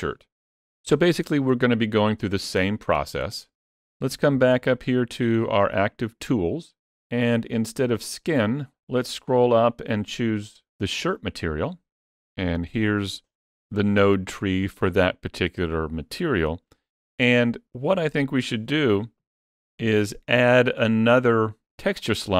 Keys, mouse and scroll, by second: 5.2 click, 8.2-9.6 scroll up 5, 10.6 click, 12.4-13.4 scroll down 3, 12.8 middle click, 16.4-18.2 scroll up 1, 18.2 click, 19.2 shift+click, 19.3 click.